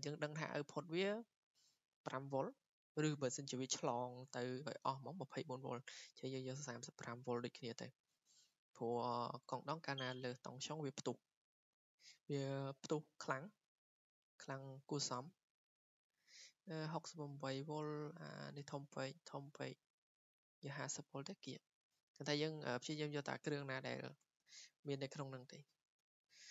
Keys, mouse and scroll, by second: 0.7 typing, 11.2 click, 13.4 click, 13.5 click, 14.0 click, 15.3 click, 19.4 click, 20.8-22.2 drag, 22.9 click, 24.3-24.6 typing, 25.4 click, 25.9 Escape, 26.1 Escape.